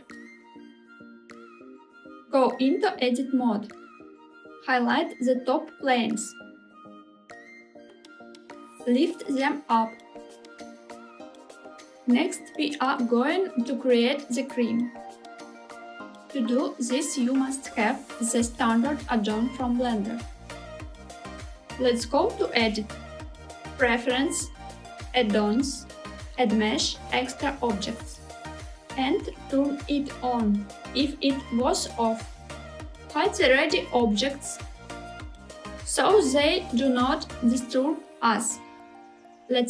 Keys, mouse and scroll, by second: 1.5 click, 2.6 Tab, 4.6 click, 4.8 click, 5.6 middle click, 6.0 scroll up 1, 6.4 shift+click, 6.5 shift+click, 6.7 c, 8.5 g, 9.1 z, 11.1 click, 11.6 click, 12.0-13.9 middle drag, 15.4-16.5 middle drag, 16.5-19.6 scroll down 3, 22.1-24.9 drag, 34.0 click, 34.9 click, 39.4 shift+a.